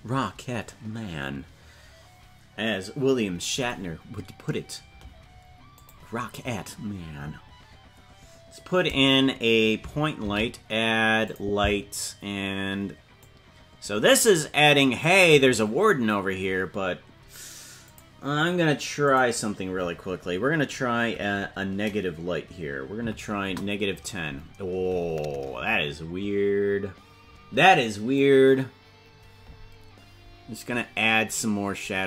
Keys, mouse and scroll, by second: 5.7 click, 10.2 shift+a, 13.6-15.5 drag, 17.8-24.6 drag, 28.1-32.0 drag.